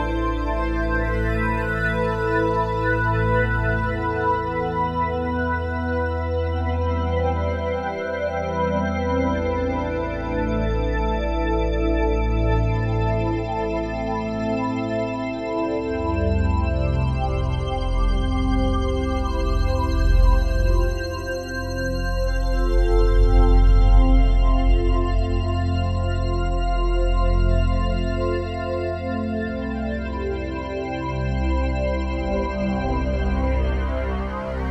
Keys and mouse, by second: 7.7 click, 8.8 click, 8.8 typing, 10.5 click, 11.1 click, 11.6 click, 12.3 click, 13.9-14.6 typing, 15.5-17.2 drag, 17.2 typing, 17.6 Return, 18.5 click, 19.0-33.2 drag, 33.8 ctrl+s.